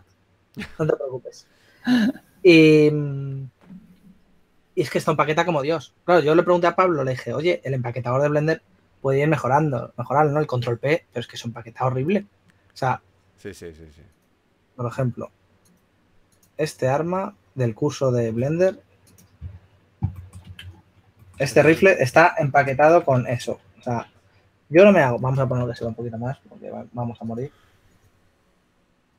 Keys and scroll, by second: 4.0 typing, 20.3-22.0 typing, 23.3 a, 26.7 typing.